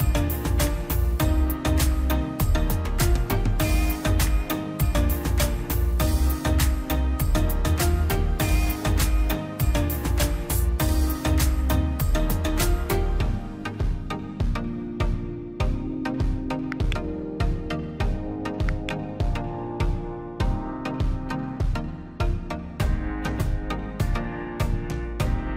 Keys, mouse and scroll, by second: 0.4 scroll down 1, 2.5 click, 3.2-3.6 scroll, 4.1 click, 5.1-5.5 scroll down 1, 5.6 click, 6.3 Delete, 6.9 e, 7.1 scroll up 1, 7.4 click, 8.9-9.2 scroll down 1, 9.3 scroll up 1, 9.6 click, 9.8 scroll down 1, 10.1 scroll up 1, 10.4 click, 11.0 scroll down 1, 11.5 scroll up 1, 12.5 click, 12.8 scroll down 1, 14.3 click, 14.9-15.2 scroll down 1, 15.6 click, 16.4 scroll down 1, 17.0 click, 17.2-17.6 scroll down 1, 18.0 click, 18.2 scroll down 1, 18.7 click, 18.9 scroll down 1, 19.3 ctrl+z, 19.4 scroll up 1, 19.7 click, 20.3 scroll down 1, 20.9 scroll up 1, 20.9 click, 22.0-22.3 scroll down 1, 22.6 click, 22.8-23.2 scroll down 1, 23.2 space, 23.3-23.6 scroll down 1, 23.8 middle click, 24.3 scroll up 1, 24.6 middle click, 24.9 scroll up 1.